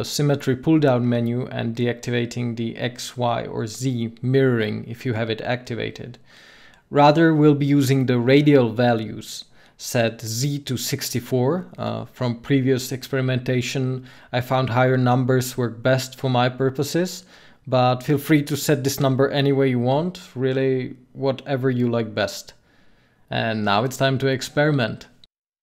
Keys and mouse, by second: 8.4-21.8 drag, 23.8 ctrl+z.